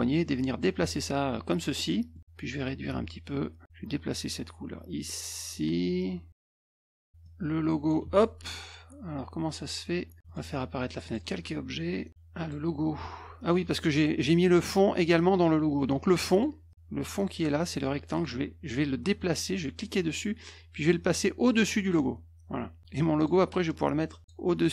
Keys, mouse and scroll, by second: 1.8 middle click, 2.8 click, 3.8-7.1 drag, 7.2 click, 8.0 ctrl+z, 10.2 click, 11.0 click, 12.3 click, 16.3 click, 16.7 click, 18.1 click, 19.7-21.9 drag, 23.1 click, 23.6 click.